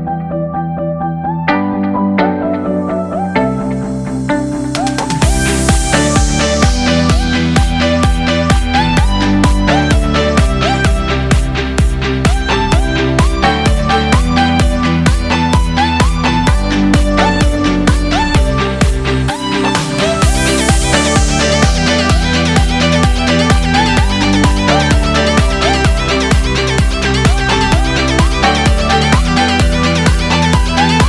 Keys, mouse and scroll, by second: 0.1 KP_0, 1.0 KP_Enter, 1.2 KP_1, 3.2 click, 3.5-9.6 drag, 6.2 l, 11.0 shift+a, 17.5 click, 19.4 Tab, 20.4 alt+z, 22.9-24.3 drag, 25.4 ctrl+KP_Add, 26.2-28.2 middle drag, 28.7 KP_1, 30.2 p.